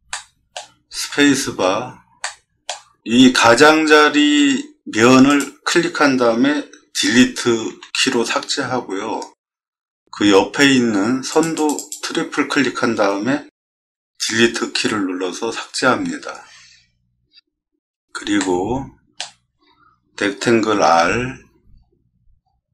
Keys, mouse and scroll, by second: 0.1-0.5 middle drag, 0.9 space, 1.1 middle click, 1.3 middle click, 1.5 middle click, 2.2-2.6 middle drag, 9.6 middle click, 9.6 scroll down 2, 11.9 click, 16.1 middle click, 17.7 middle click, 17.7 scroll up 4, 17.9 middle click, 18.4-19.1 shift+middle drag, 20.8 r, 21.6 middle click, 21.7 middle click, 21.8 middle click, 22.3 middle click.